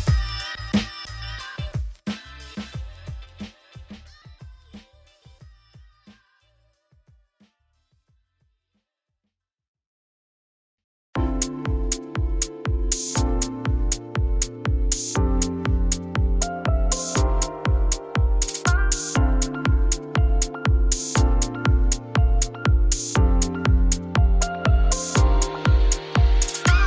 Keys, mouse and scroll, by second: 0.1 alt+d, 1.0 alt+d, 1.9-3.0 middle drag, 3.0 scroll down 1, 3.1 alt+d, 5.1 g, 7.7 alt+d, 8.5-10.2 middle drag, 10.2 alt+d, 11.3 alt+d, 12.0 middle click, 12.2 alt+d, 13.3 g, 13.9 click, 14.0 middle click, 14.1 scroll down 1, 14.2 middle click, 14.5 scroll up 8, 14.8 middle click, 15.7 click, 15.9 shift+click, 16.1 alt+d, 17.2 click, 17.3 middle click, 17.7 scroll down 5, 17.9-19.1 middle drag, 19.5 shift+middle click, 19.7 scroll up 2, 20.3 scroll down 1, 20.5 shift+middle click, 21.1 scroll up 1, 21.3-22.3 shift+middle drag, 22.3 click, 22.9 shift+click, 26.3 r.